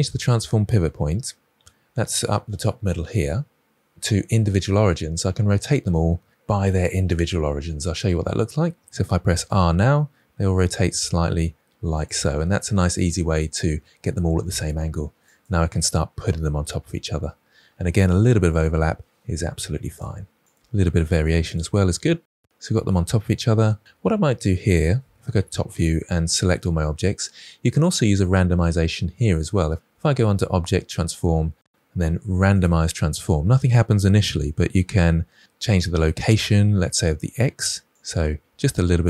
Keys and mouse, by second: 3.0-8.0 drag, 9.2 r, 11.9 click, 15.2 click, 16.1 g, 18.1 g, 19.0 g, 20.5 click, 20.9 r, 21.2 g, 22.0-22.4 middle drag, 25.1 KP_7, 25.7 drag, 30.1-32.6 drag, 37.9 click, 38.6 click.